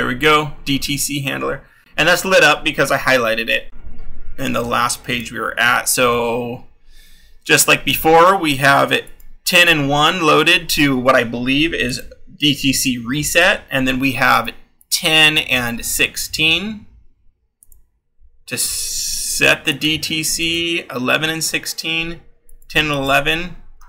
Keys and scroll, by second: 5.7-10.8 scroll, 15.6-20.9 scroll, 23.7-23.8 scroll.